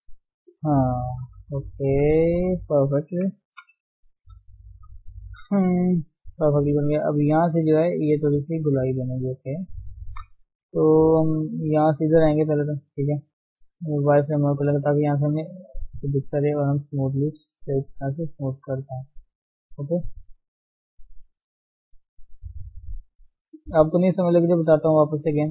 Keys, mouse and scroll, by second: 0.2 shift+middle click, 0.7-1.4 scroll down 2, 0.9 shift+middle click, 1.6-3.5 middle drag, 3.5 KP_1, 3.8-4.2 scroll up 1, 5.4 ctrl+Tab, 5.6 middle click, 6.4 scroll up 1, 6.7 shift+middle click, 7.0 Tab, 7.9 middle click, 8.7 Tab, 8.9-9.3 scroll up 1, 9.3 middle click, 10.0 shift+s, 10.4 f, 14.3 click, 14.8-16.1 middle drag, 16.1 click, 16.4 middle click, 17.2-17.9 scroll up 1, 17.9-19.2 drag, 19.2 middle click, 19.7 click, 20.3 middle click, 21.1-22.1 drag, 22.1 middle click, 22.7 click, 23.7-25.5 middle drag.